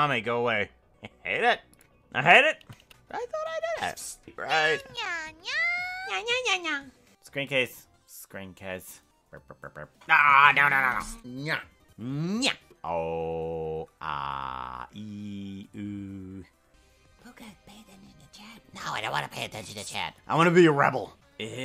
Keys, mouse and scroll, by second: 9.1 click, 9.1 KP_0.